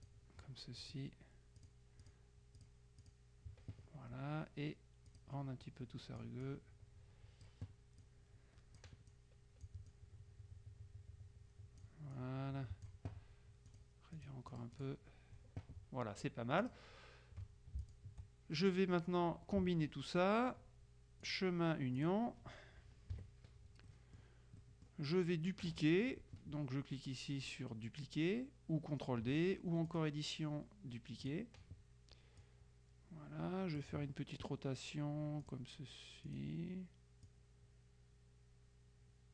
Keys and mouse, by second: 0.9 click, 1.7 click, 3.1 click, 5.2 click, 6.5 click, 8.1 click, 10.0 click, 12.3 click, 13.8-15.4 drag, 16.7 click, 17.9 shift+click, 21.3 click, 22.1 click, 23.2 KP_Subtract, 23.9 click, 29.9 click, 31.3 click, 32.5-34.3 drag, 35.5 click, 36.3 click, 37.3-39.3 drag.